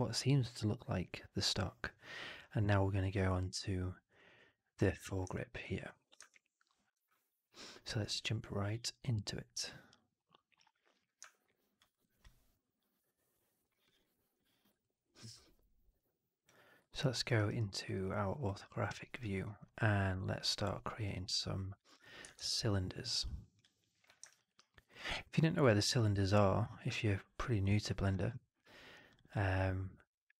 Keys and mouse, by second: 10.9 click, 11.4 alt+drag, 11.8 alt+middle click, 11.9 alt+right click, 12.1-13.5 alt+drag, 13.6 alt+middle drag, 13.8 alt+right drag, 13.9 alt+click, 14.7 alt+click, 15.9 click, 16.3 click, 16.8 alt+middle click, 17.1 alt+right click, 17.3 alt+right click, 17.5 alt+right click, 17.7 alt+middle click, 18.5 alt+right click, 19.2 alt+middle click, 22.3 shift+Tab, 24.2 right click, 24.4 right click, 24.6 middle click, 24.8 right click, 25.2 alt+middle click, 25.6 alt+right click, 25.9 alt+middle click, 26.2 alt+right click, 26.5-27.5 alt+middle drag, 27.6 alt+right click.